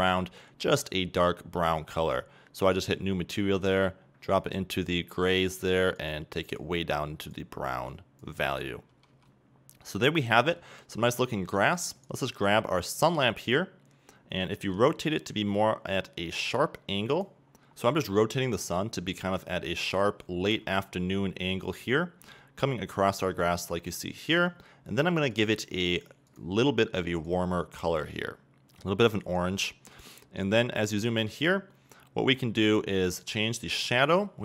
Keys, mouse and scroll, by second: 9.3 a, 10.2-12.1 middle drag, 12.4 right click, 13.7 scroll down 2, 14.9 r, 17.5 click, 17.6 scroll down 2, 17.7 scroll up 2, 18.7 r, 20.1 click, 20.2 scroll down 1, 20.8 g, 22.0 click, 22.1 scroll up 1, 22.5-24.1 middle drag, 23.3 r, 24.1 click, 24.6 middle click, 25.5 click, 30.4 scroll up 2, 30.9 middle click, 31.3 scroll up 2, 32.9-33.2 scroll up 1, 33.2-34.4 drag.